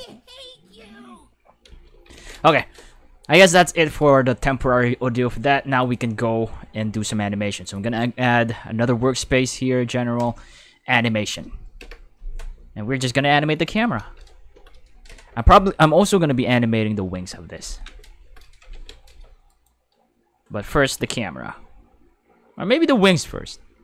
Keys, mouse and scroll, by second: 1.6 space, 2.1 ctrl+s, 5.8 click, 7.6 click, 10.2 click, 11.8 Home, 13.6 click, 16.1 right click, 18.7 ctrl+s, 19.5 right click.